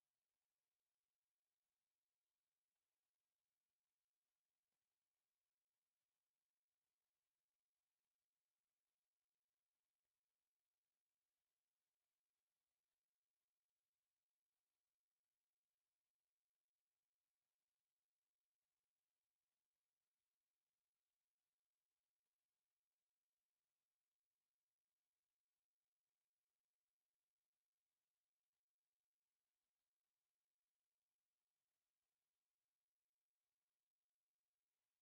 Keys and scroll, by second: 4.0-7.5 typing, 4.5 Escape, 5.1 Escape, 6.3 Return, 6.9 Return, 7.0 Escape, 7.9 Escape, 10.4 m, 10.5 space, 11.2 Escape, 13.9 m, 14.1 space, 15.2 Escape, 15.7 m, 15.9 space, 18.9 Escape, 19.6 Escape, 22.6 Escape, 22.8 e, 22.8 space, 28.7 Escape, 29.1 o, 29.2 space, 30.1 Escape, 30.8-35.0 typing, 31.4 Escape, 32.2 Escape, 33.4 Escape.